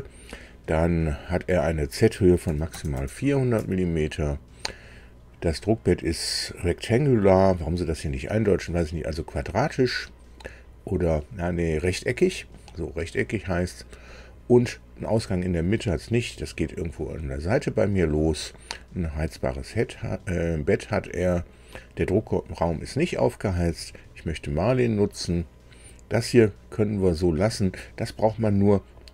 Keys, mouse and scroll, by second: 2.4 KP_4, 2.7 KP_0, 2.9 KP_0, 3.6 Tab, 19.1 click.